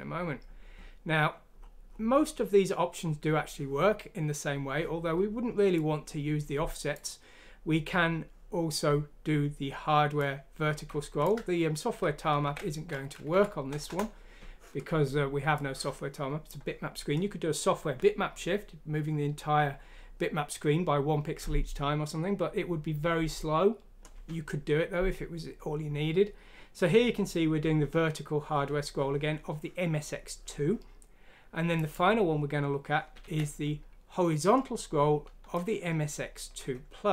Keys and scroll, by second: 12.4 ctrl+q, 13.3 F6, 13.8 Return, 33.2 ctrl+z.